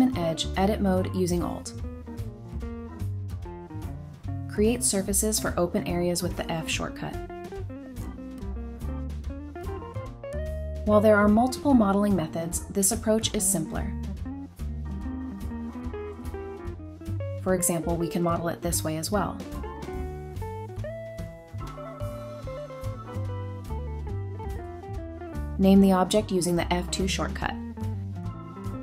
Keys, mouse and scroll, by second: 1.2 typing, 2.3 typing, 2.7 alt+click, 4.3 shift+click, 5.0 alt+shift+click, 6.1-7.0 typing, 7.9 middle click, 8.8 scroll down 1, 9.0 middle click, 12.5 3, 13.4 middle click, 14.1-15.1 scroll up 1, 15.1 b, 15.5 Escape, 16.1 3, 16.8 alt+click, 17.2 alt+click, 17.9 Delete, 19.5-20.1 typing, 23.3 middle click, 24.7 Tab, 24.8 scroll down 1, 25.0 middle click, 25.4 scroll up 1, 25.9 F2, 26.4-28.6 typing.